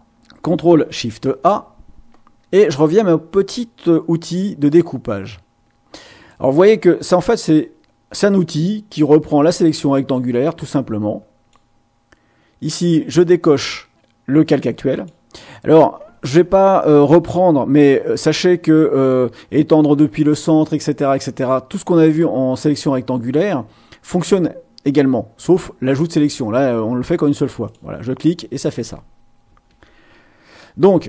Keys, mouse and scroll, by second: 1.2 ctrl+shift+a, 4.6 click, 6.3-11.7 drag, 14.9 click, 27.6 click, 29.7 ctrl+z.